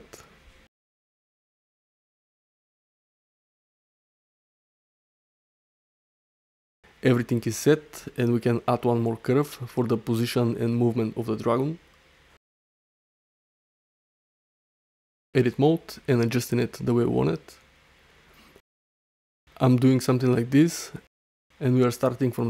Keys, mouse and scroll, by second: 0.4 space, 1.6-2.8 middle drag, 2.9 middle click, 3.1 click, 9.8-10.1 alt+drag, 10.3 ctrl+alt+middle drag, 10.8 alt+shift+middle drag, 11.1 shift+a, 13.7 ctrl+alt+drag, 14.3-18.8 typing, 15.9 click, 17.4 Tab, 19.2 Tab, 19.5 alt+middle click, 19.8 ctrl+alt+middle drag, 20.2 alt+shift+middle click, 20.5 alt+middle click, 20.8 ctrl+alt+middle click, 21.1-21.6 ctrl+alt+middle drag.